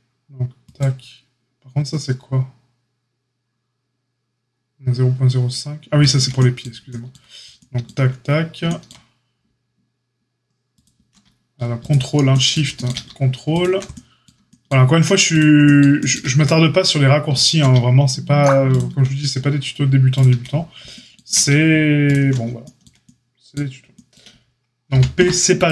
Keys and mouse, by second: 0.7-1.8 shift+drag, 1.8-10.7 shift+middle drag, 10.7 ctrl+click, 10.8-13.4 ctrl+middle drag, 13.4 ctrl+click, 13.6-25.7 ctrl+middle drag, 15.2 shift+click, 17.3 ctrl+click, 18.6 shift+click, 22.0 ctrl+drag, 24.9 p.